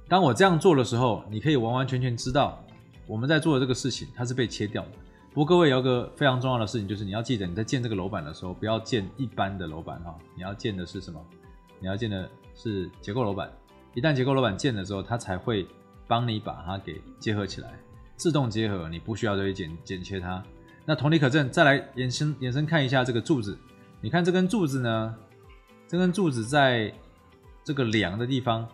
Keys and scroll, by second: 2.6 ctrl+z.